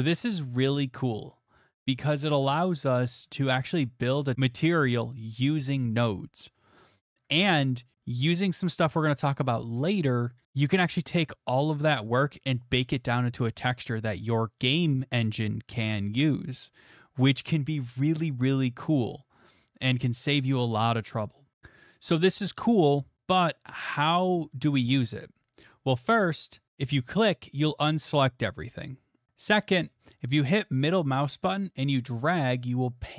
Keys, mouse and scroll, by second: 0.0-4.3 drag, 26.7-30.2 drag.